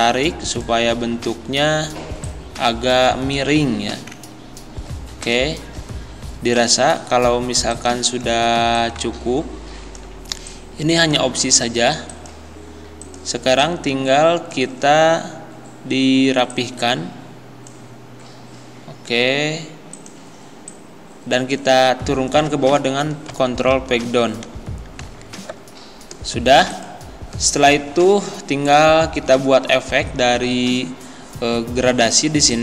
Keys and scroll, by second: 23.4 ctrl+Page_Down.